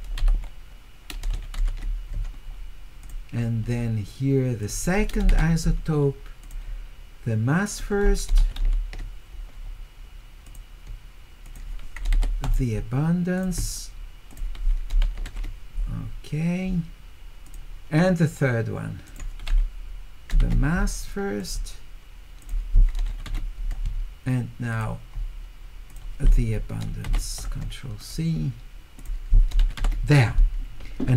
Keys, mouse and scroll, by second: 1.3 q, 3.0 click, 4.6 click, 6.4 click, 7.7 click, 8.4 u, 10.5 click, 11.4 click, 13.4 click, 14.3 click, 15.0 q, 17.5 click, 19.1 click, 22.4 click, 23.1 q, 24.7 click, 25.9 click, 28.0 click, 29.0 click, 29.6 q.